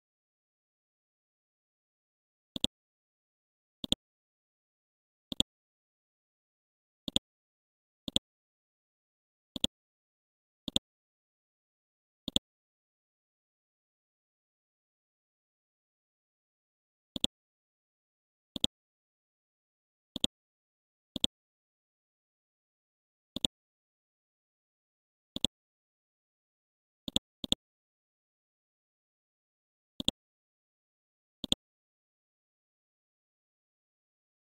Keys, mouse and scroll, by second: 5.3 right click, 7.1 shift+click, 8.0-9.5 drag, 10.2-10.7 scroll down 1, 10.7-14.2 drag, 14.2-14.9 scroll up 1, 15.2 Home, 17.1-19.7 drag, 20.1 ctrl+click, 21.1 shift+click, 23.4 shift+click, 25.3 shift+click, 26.5 scroll down 1, 27.0 click, 28.7 scroll up 1, 29.3 ctrl+g, 30.0 shift+click, 30.4 shift+c, 30.8 scroll down 1, 31.4 click, 33.7-34.5 scroll down 1.